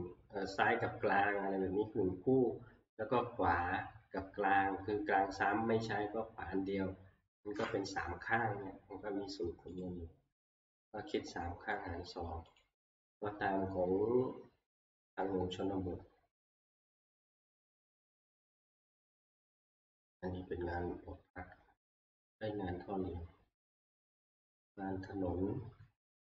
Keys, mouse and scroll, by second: 9.8 click, 12.6 click, 17.4 click, 19.0 click, 24.0 click, 25.1 click.